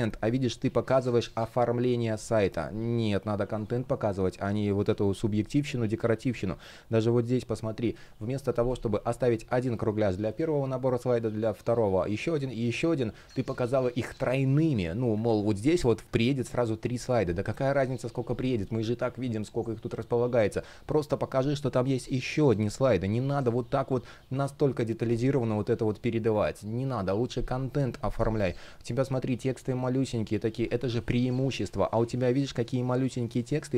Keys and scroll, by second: 1.7 super+z, 7.5 super+z, 13.1 super+z, 14.1 super+z, 14.8 super+z, 26.0 super+z.